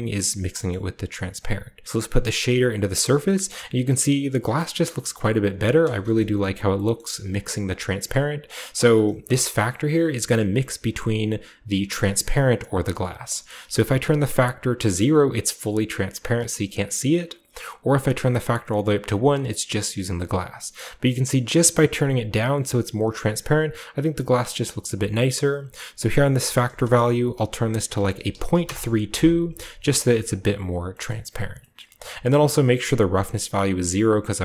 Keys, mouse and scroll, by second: 0.0 drag, 0.7-1.5 middle drag, 1.3 click, 1.9 click, 2.9-4.5 drag, 3.7-4.5 scroll down 1, 4.5-4.9 shift+middle drag, 4.5 scroll down 1, 4.7-6.0 scroll up 1, 5.1-6.6 shift+middle drag, 6.0-6.6 shift+scroll up 1, 6.0 KP_0, 6.9 shift+middle click, 6.9-7.6 shift+scroll up 1, 7.6-9.4 shift+drag, 7.6-9.4 shift+scroll up 1, 8.1-9.4 shift+middle drag, 10.3-12.8 drag, 13.0 click, 13.0 middle click, 13.0-14.0 right drag, 14.6-16.6 drag, 17.7-28.1 drag, 28.2 typing, 28.6 Return, 30.5-30.9 drag, 30.6 typing, 30.7-31.7 scroll down 1, 31.1-31.6 middle drag, 31.7-33.9 scroll up 1, 31.7 middle click, 32.6-33.9 drag.